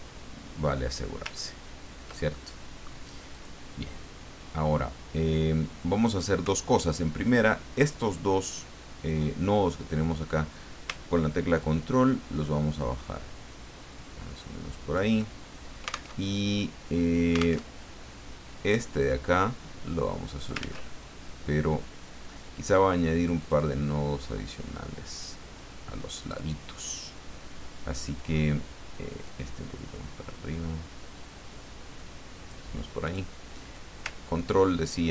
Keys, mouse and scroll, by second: 1.3-1.7 ctrl+scroll up 2, 2.3 ctrl+click, 3.3 click, 7.4 click, 11.6-15.1 ctrl+drag, 16.2 alt+Tab, 17.6 alt+Tab, 19.1-20.6 drag, 20.6 ctrl+z, 23.4 click, 26.2 click, 29.2-32.6 drag, 33.0 click, 33.7-35.1 drag.